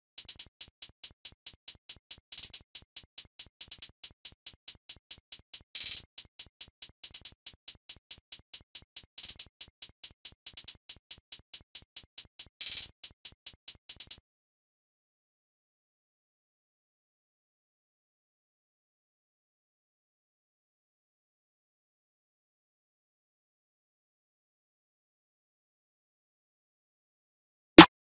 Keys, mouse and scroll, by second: 15.0 F1, 15.5 F1, 15.5 click, 17.7 click, 20.7 click, 20.9 click, 22.0 click, 22.5 click, 25.8-26.4 drag.